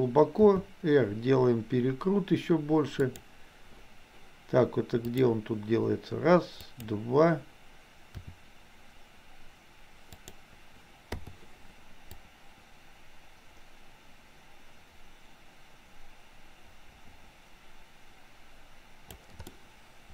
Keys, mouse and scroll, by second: 0.5 r, 5.2 click, 6.8 click, 8.2 r, 12.3-19.3 drag, 19.5 middle click.